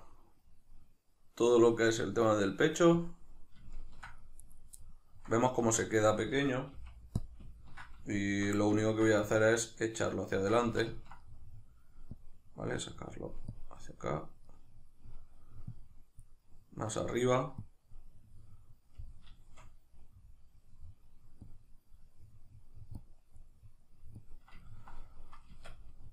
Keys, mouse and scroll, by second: 3.1 click, 3.7 ctrl+middle click, 4.4 right click, 4.8-7.2 middle drag, 5.6 Tab, 6.7 f, 7.2 click, 7.5-9.2 ctrl+middle drag, 9.2-11.0 drag, 10.6 ctrl+z, 11.0-12.1 ctrl+middle drag, 12.1 click, 12.8 middle click, 13.5 click, 14.5-15.7 middle drag, 15.7 click, 16.5-17.6 middle drag, 17.6 click, 18.2-21.5 middle drag, 21.5 click, 22.1 middle click, 23.0 click, 23.5 middle click, 24.2 click, 24.7-26.1 ctrl+middle drag, 25.5 Tab.